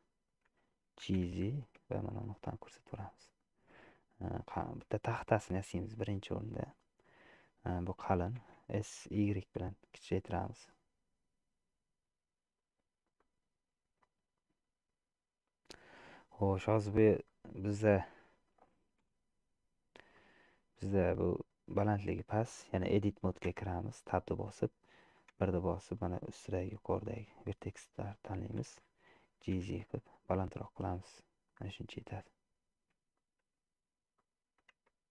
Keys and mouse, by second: 1.2 g, 3.6 shift+click, 4.1 click, 5.1 shift+click, 6.1 shift+click, 8.6 s, 13.3-16.6 middle drag, 17.3-18.6 middle drag, 19.1 KP_1, 20.2-21.5 middle drag, 22.1 shift+middle click, 22.9 shift+middle click, 23.8 Tab, 25.6 1, 25.9-27.2 drag, 27.8 middle click, 29.5 g, 32.1-33.8 middle drag, 34.2-35.1 middle drag, 35.0 Tab.